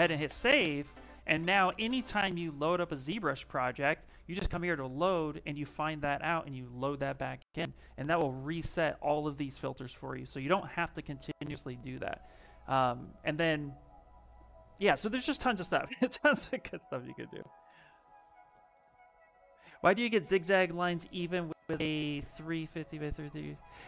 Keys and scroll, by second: 0.0 Return.